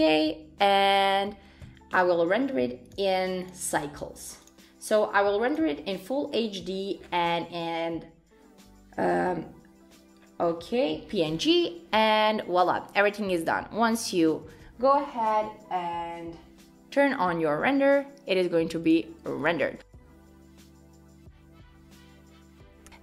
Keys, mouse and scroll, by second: 2.0 click, 2.9 click, 3.4 click, 5.5 click, 6.4-8.5 scroll down 17, 8.5-9.7 scroll down 5, 10.2-11.1 scroll down 6, 11.1 scroll down 2, 11.4-11.8 scroll up 5, 11.8-12.6 scroll down 2, 12.2-12.6 scroll up 1, 13.4 click, 18.8 click.